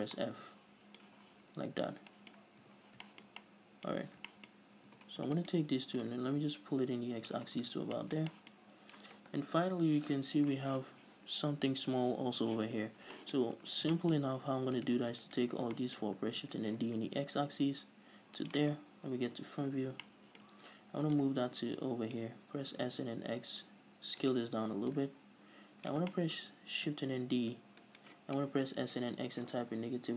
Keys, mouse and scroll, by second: 0.3 f, 0.6-5.8 middle drag, 1.6 scroll down 2, 1.8 a, 3.2 scroll down 2, 4.4-5.3 scroll up 4, 5.3 Tab, 5.8 alt+right click, 6.4-8.4 drag, 7.9-8.4 scroll down 4, 8.0 Tab, 8.4-15.2 middle drag, 9.2-11.2 scroll up 2, 11.2-13.0 scroll up 1, 13.0-14.0 scroll up 2, 14.0 Tab, 14.7-15.2 scroll up 2, 15.2 right click, 15.7 ctrl+right click, 16.0 scroll down 2, 16.2-19.2 shift+middle drag, 16.8 shift+d, 19.2 click, 19.5 KP_1, 20.5-21.6 shift+middle drag, 20.9-21.6 scroll up 2, 21.6-24.8 drag, 23.0 s, 25.3-26.5 drag, 26.5-28.4 shift+middle drag, 27.7 shift+d, 28.4 right click, 28.9 s.